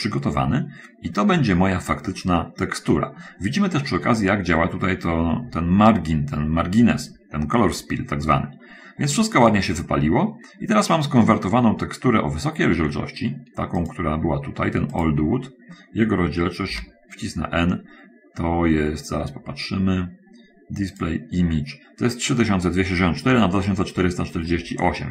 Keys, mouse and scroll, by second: 0.2 middle click, 0.2-1.3 scroll up 2, 0.7 middle click, 2.0 scroll down 2, 2.7 middle click, 3.5-4.4 scroll up 1, 8.9-9.3 scroll down 1, 11.7-13.2 shift+middle drag, 15.3 click, 16.2-16.5 scroll down 1, 17.1 n, 18.4 middle click, 21.3 click.